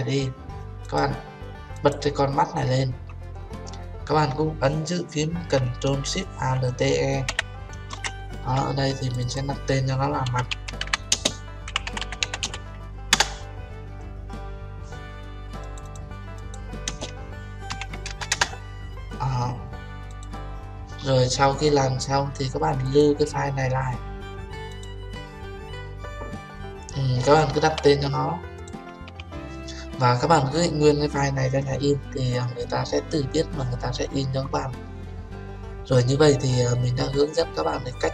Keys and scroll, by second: 13.2 Return, 18.4 Return.